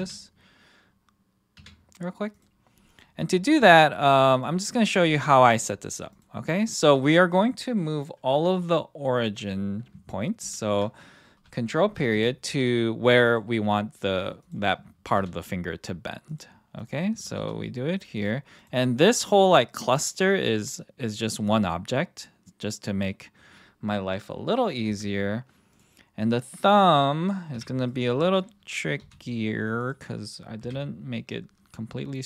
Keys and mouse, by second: 0.0 /, 1.5 KP_3, 2.9 click, 3.6 g, 4.3 click, 4.8 click, 10.4 ctrl+., 12.1 g, 13.2 click, 17.3 g, 18.1 click, 18.5 click, 19.3-19.7 middle drag, 20.5-21.7 middle drag, 21.9-23.5 middle drag, 24.9 KP_1, 25.7 click, 27.5 KP_3, 29.0 g, 29.8 click, 30.6 KP_1.